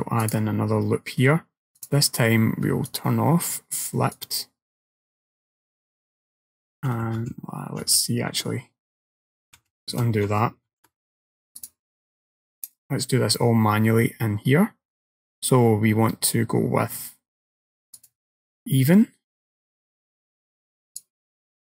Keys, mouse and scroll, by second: 2.9 click, 4.2 click, 6.9 ctrl+z, 7.2 ctrl+z, 7.9 ctrl+z, 9.6 ctrl+z, 10.8 ctrl+r, 18.0 click.